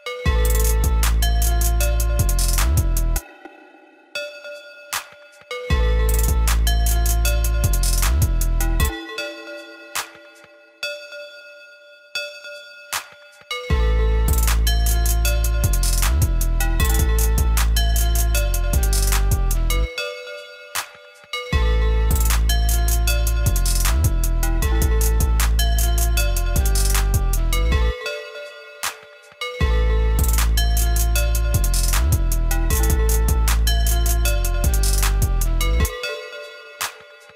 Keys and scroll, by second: 2.9 ctrl+x, 10.3 ctrl+x, 19.5 ctrl+x.